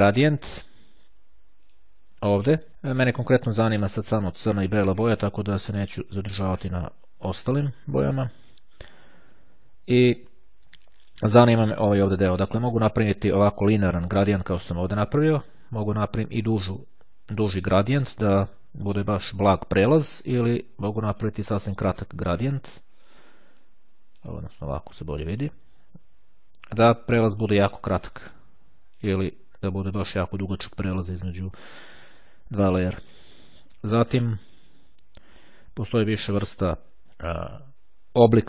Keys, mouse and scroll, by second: 0.6-2.2 drag, 3.3-6.1 drag, 6.7 click, 10.7 click, 11.8-13.7 drag, 15.5-18.0 drag, 21.0-22.9 drag, 23.5-24.9 drag, 28.2-29.6 drag, 34.6 click.